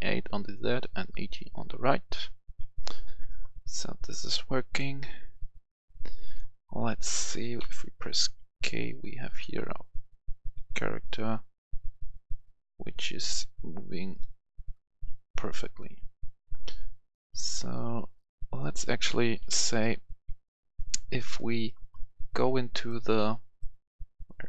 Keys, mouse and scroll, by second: 2.1 right click, 4.7 click, 7.6 k, 9.7-12.0 typing, 19.5 Escape, 20.7 click, 21.3 right click, 23.9 scroll up 1.